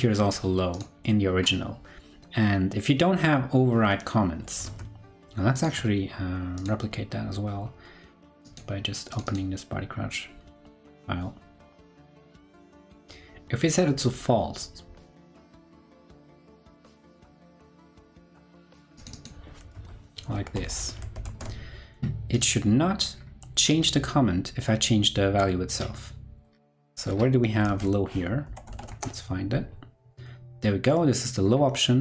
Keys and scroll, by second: 4.6 super+Tab, 21.0 super+s, 21.2 super+Tab, 27.6 super+f.